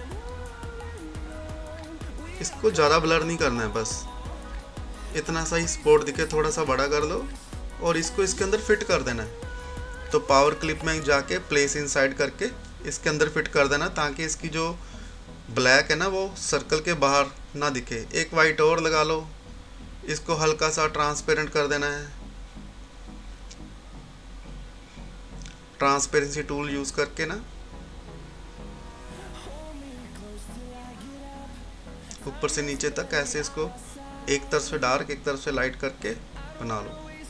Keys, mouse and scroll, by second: 12.3-19.3 drag, 20.9 right click, 21.7 click, 30.6-34.3 drag, 34.4-35.8 drag, 35.8-37.2 drag.